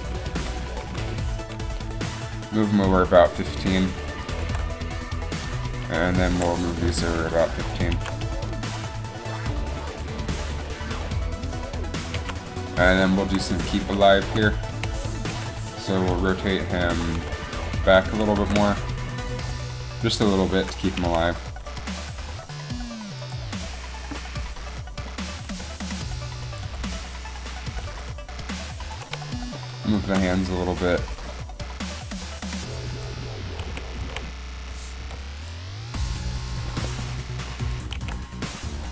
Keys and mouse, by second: 0.0 Right, 0.2 Right, 0.5 Right, 1.0 Right, 2.1 g, 4.6 shift+d, 8.1 alt+a, 12.3 alt+a, 13.4 Up, 14.8 a, 15.4 KP_3, 16.9 r, 18.3 r, 21.2 a, 22.4 g, 25.6 r, 26.8 r, 26.9 r, 27.8 r, 27.9 r, 31.4 g, 33.7 a, 34.2 a, 35.1 i, 37.9 click, 38.1 alt+a.